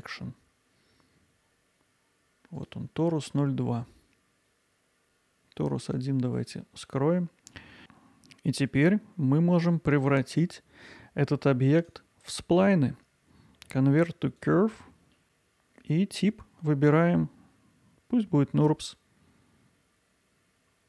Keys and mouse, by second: 2.6-7.5 drag, 7.5 middle click, 10.1-11.4 alt+middle drag, 11.9-15.1 right drag, 15.2-20.8 right drag.